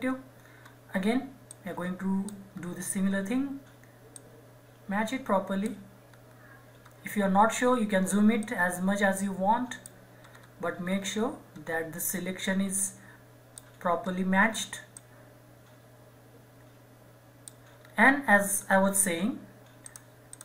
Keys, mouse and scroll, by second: 0.0 scroll up 1, 1.5 click, 2.5-3.1 scroll down 1, 3.1-4.2 scroll up 1, 4.2 click, 5.3 right click, 5.4 right click, 6.1 scroll down 1, 8.4-10.2 drag, 10.0 click, 10.2 scroll up 2, 10.8-12.8 scroll down 2, 12.8 click, 14.0-14.9 scroll up 2, 14.9-17.3 drag, 17.3 right click, 17.8-18.4 scroll down 1, 18.6-19.8 scroll up 2, 19.8-20.4 drag.